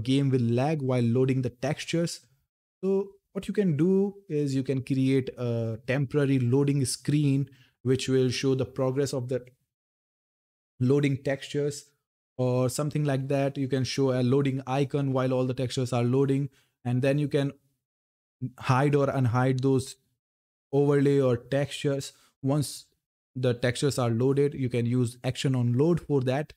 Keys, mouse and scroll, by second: 3.5-6.3 drag, 18.5 click, 26.3-26.5 scroll down 1.